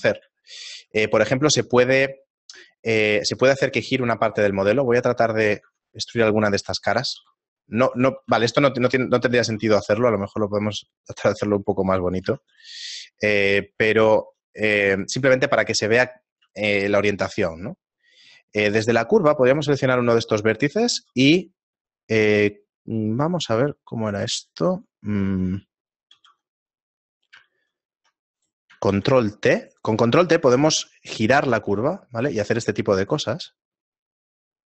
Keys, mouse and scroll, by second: 0.5 middle click, 1.1 right click, 1.5 shift+middle click, 4.0 Tab, 4.5 Tab, 4.5 right click, 6.2 ctrl+Tab, 6.2 shift+middle click, 6.2-7.0 scroll up 4, 7.0 shift+middle click, 7.0 right click, 7.3 e, 8.4 Tab, 9.4 Tab, 9.5 ctrl+r, 12.3 Tab, 12.5 a, 12.8-13.6 scroll down 5, 13.6 shift+middle click, 15.0 right click, 16.6 shift+middle click, 18.2 right click, 18.7 Tab, 20.3 right click, 20.3 shift+middle click, 21.1 ctrl+r, 26.1 alt+r, 27.1 right click, 28.4 right click, 28.9 ctrl+t.